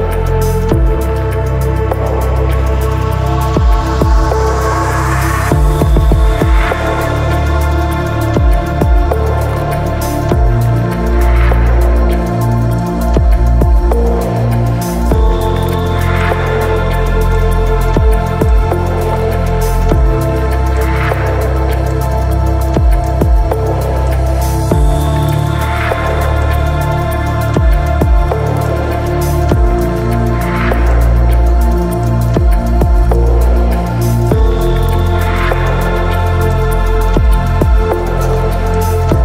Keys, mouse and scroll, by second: 0.2 click, 0.4 KP_0, 1.0 click, 3.7 middle click, 4.3-7.1 drag, 7.1 Up, 7.3 click, 7.9 click, 9.0 click, 9.8 click, 11.0 click, 11.7 KP_0, 12.1 click, 12.9 middle click, 13.0 KP_0, 13.2 shift+middle click, 13.6 click, 13.7 KP_0, 14.6 click, 15.3 click, 16.2 click, 17.0 click, 17.7 click, 18.5 click, 19.5-21.0 drag, 21.3 click, 22.0-23.7 drag, 22.3 Up, 24.2 click, 25.2-26.3 drag, 26.4-27.8 drag, 26.6 Up, 27.0 Up, 27.0 Up, 28.9 click, 31.5 shift+middle click, 32.0 click, 32.1 KP_0, 38.8 click.